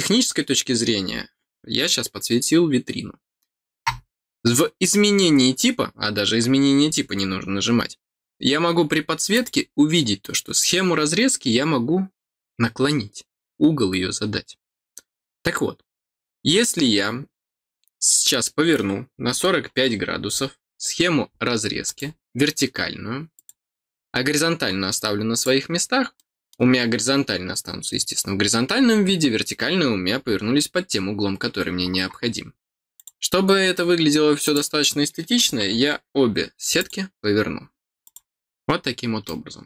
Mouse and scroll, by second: 7.3 middle click, 9.3 click, 21.8 click, 23.3 click, 24.7 scroll down 1, 25.3 click, 25.8 scroll down 1, 26.1 middle click, 32.9 click, 33.4 middle click, 33.4-33.8 scroll down 2, 34.4 click, 36.7 click, 38.0 click, 38.5 middle click, 38.5 scroll down 2, 39.2 middle click.